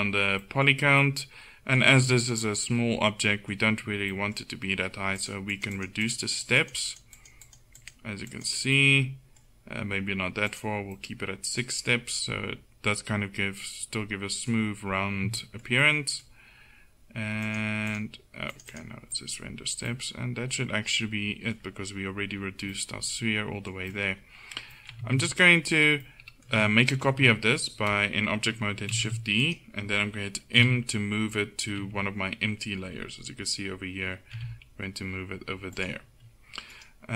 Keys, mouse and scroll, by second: 5.3-12.6 drag, 12.6 middle click, 15.5 middle click, 17.5-19.0 middle drag, 19.0 click, 19.2-20.6 middle drag, 20.8 middle click, 22.8 middle click, 25.1 Tab, 27.1 KP_1, 29.0 shift+d, 30.7 m, 31.8 m, 34.4 m, 36.8 right click.